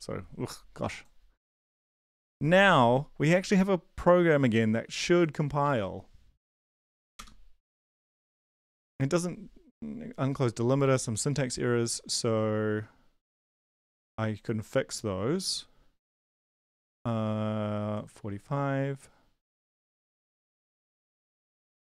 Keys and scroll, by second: 5.6 ctrl+`, 6.5 ctrl+l, 6.9 Up, 7.1 Return.